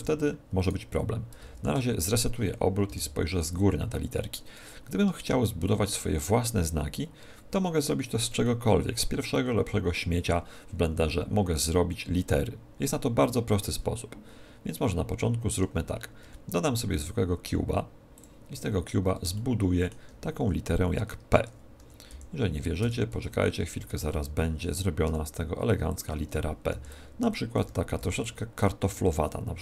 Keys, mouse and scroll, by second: 0.6 right click, 1.5 alt+r, 2.8 KP_7, 4.4-7.1 middle drag, 7.6-10.3 middle drag, 16.2 shift+a, 19.3-21.3 middle drag, 21.3 Tab, 21.7-25.0 typing, 26.0-27.9 drag, 26.6 b, 27.7 a, 28.0 b, 28.9 e.